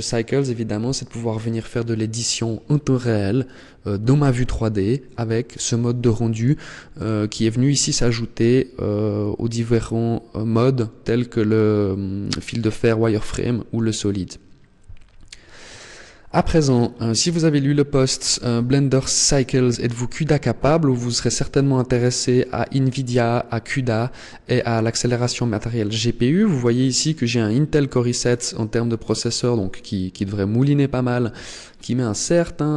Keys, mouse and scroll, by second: 6.7 click, 15.9-18.4 scroll up 11.